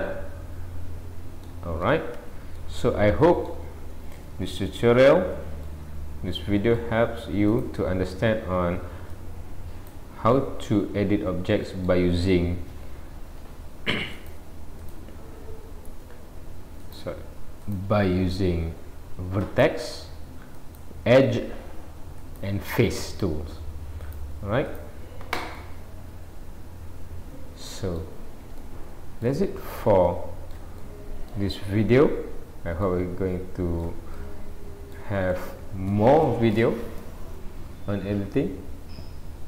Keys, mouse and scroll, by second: 1.8-2.2 scroll down 2, 2.2 Tab, 2.6 middle click, 7.6 click, 9.1 click, 10.3 middle click, 14.2 click, 16.8 click, 20.6 click, 22.2 click, 24.1 click, 25.6 middle click, 29.7 shift+middle click, 30.8 middle click, 31.7-32.2 scroll up 2, 32.8-33.8 scroll up 1, 33.8 shift+middle click, 34.2 middle click, 35.3 shift+middle click.